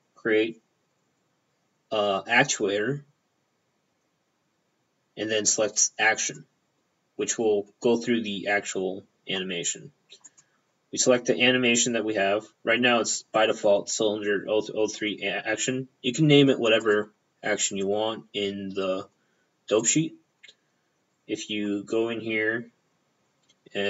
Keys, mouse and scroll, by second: 6.3 click, 6.5 p, 10.3 click, 16.9 click, 17.0 p, 17.8 click, 17.9 p, 19.9 click.